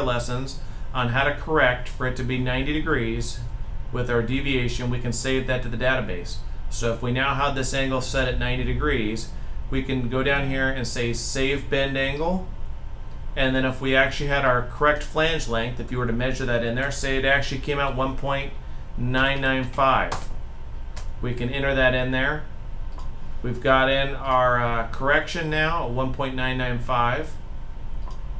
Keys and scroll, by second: 17.7 typing, 18.9-19.3 typing.